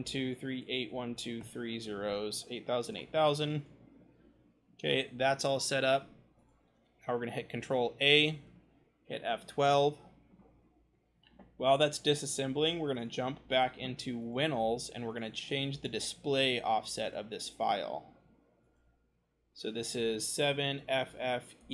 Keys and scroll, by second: 0.8 0, 9.4 F12, 20.7 f, 21.5 e.